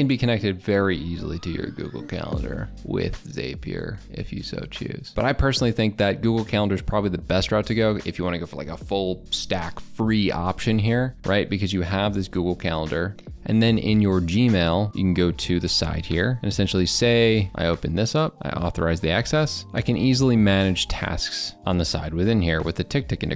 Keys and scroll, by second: 5.1 alt+Tab, 19.6 ctrl+r.